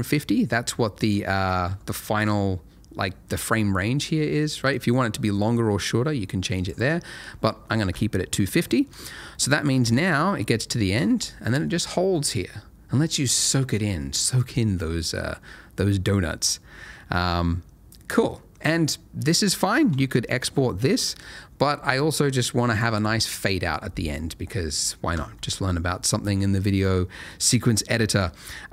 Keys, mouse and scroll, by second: 2.0 middle click, 4.7 click, 6.5 right click, 8.5 click, 9.8 space, 21.7 space, 21.9 click.